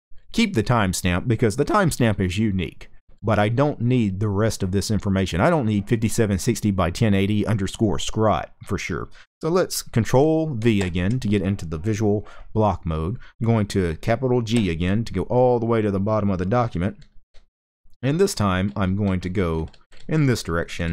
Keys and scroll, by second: 2.7 typing, 10.5 ctrl+v, 14.2 shift+g, 16.7-20.9 typing.